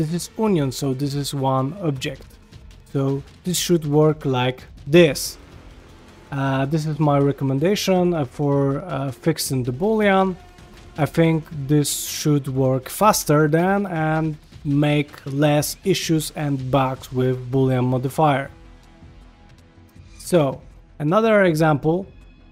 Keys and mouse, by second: 0.2-2.6 middle drag, 2.9 shift+middle click, 4.1-4.6 shift+middle drag, 5.7 ctrl+Tab, 18.8 ctrl+middle click, 19.7 g, 21.1 click, 21.5 x, 22.3 shift+middle drag.